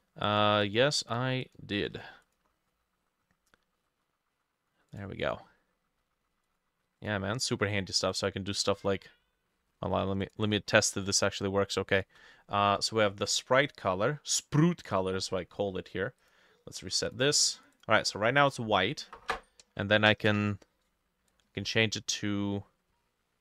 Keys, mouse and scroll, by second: 0.3 double click, 0.7 double click, 1.1 double click, 1.5 double click, 1.9 ctrl+s, 9.1-10.7 scroll down 6, 10.7-11.1 scroll down 8, 12.0 shift+click, 15.3 Escape.